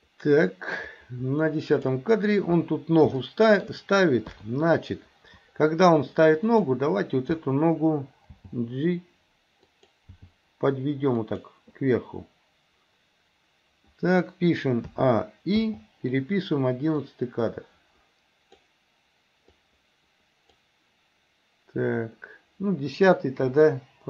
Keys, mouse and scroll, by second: 3.3 shift+middle click, 4.3 KP_3, 6.5 click, 8.4 g, 10.2 g, 15.0 a, 15.7 i, 17.1-18.7 drag, 19.5-20.6 drag, 23.5 Delete.